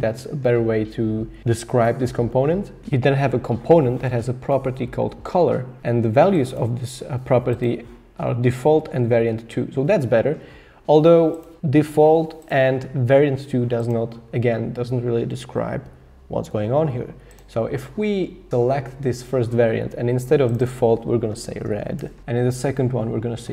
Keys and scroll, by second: 21.3-22.4 typing.